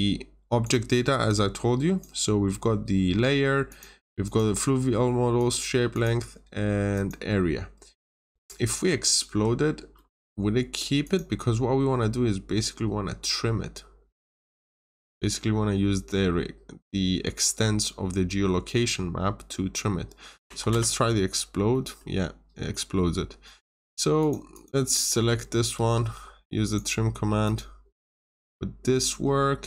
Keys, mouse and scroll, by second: 1.2 click, 9.2 Escape, 9.5 scroll down 1, 9.9 middle click, 10.3 scroll down 1, 10.9 click, 20.4 x, 20.6 Return, 21.6 middle click, 22.4 scroll down 1, 22.6 middle click, 24.1 click, 24.4 double click, 25.0 middle click, 25.7 typing, 25.7 Return, 26.6 click.